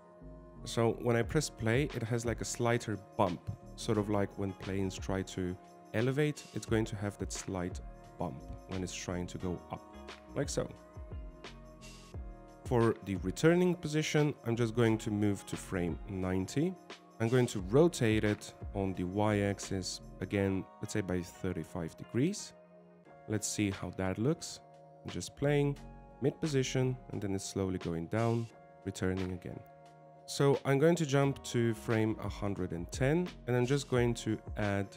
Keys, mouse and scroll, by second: 2.4 click, 3.4 alt+a, 4.3 alt+a, 10.0 click, 10.3 alt+a, 13.9 alt+a, 16.1 click, 19.5 r, 24.8 click, 26.2 alt+a, 30.2 click, 32.0 click.